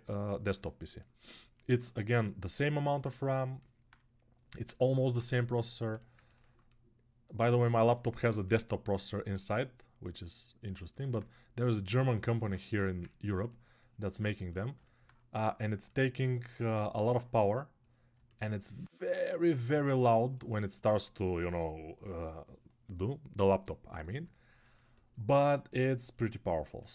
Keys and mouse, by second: 1.0-8.2 ctrl+alt+right drag, 8.4 alt+right click, 8.7-26.8 alt+drag, 12.5 3, 26.8 alt+q, 26.8-26.9 ctrl+alt+right drag.